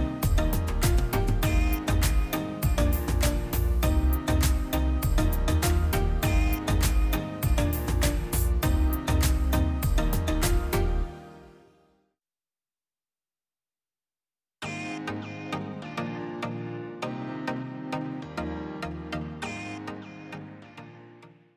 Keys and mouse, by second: 0.3 click, 3.1-7.2 drag.